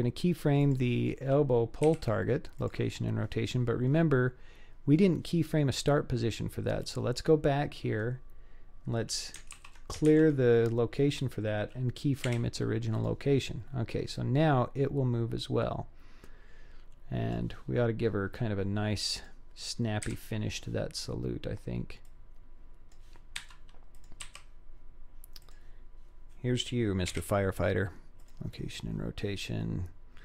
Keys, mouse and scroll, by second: 0.7 click, 1.8 i, 6.8 click, 9.6 alt+r, 10.1 alt+g, 12.2 i, 14.2-17.4 drag, 18.0-19.2 scroll up 3, 19.2 click, 20.1 KP_7, 22.1 click, 23.4 g, 24.3 r, 27.1 i.